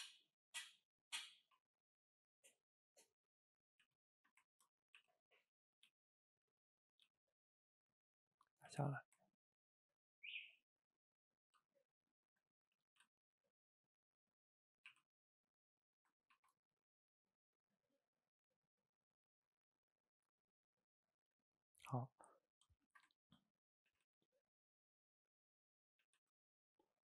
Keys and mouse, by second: 0.8 click, 0.9 middle click, 1.4 ctrl+t, 2.7-3.4 middle drag, 3.4 click, 3.9 shift+z, 4.1 shift+middle click, 5.0 e, 6.9 click, 7.1 g, 8.4 middle click, 8.7 shift+z, 9.2-12.2 ctrl+middle drag, 12.2 shift+click, 12.5-12.9 middle drag, 12.9 g, 13.7 middle click, 14.3 click, 14.4-14.9 middle drag, 14.9 r, 16.3 ctrl+t, 17.7-20.8 middle drag, 21.2 shift+click, 22.0-23.9 middle drag, 23.9 g, 25.9 click, 26.1 g.